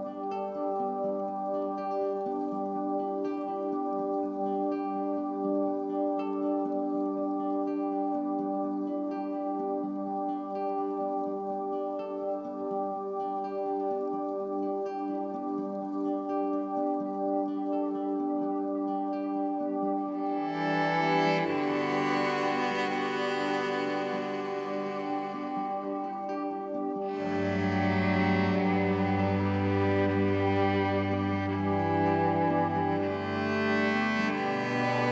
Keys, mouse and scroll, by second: 0.7 click, 3.2 click, 6.4 shift+click, 7.1-21.0 drag, 23.0-32.9 drag, 33.2 ctrl+g, 34.9 click.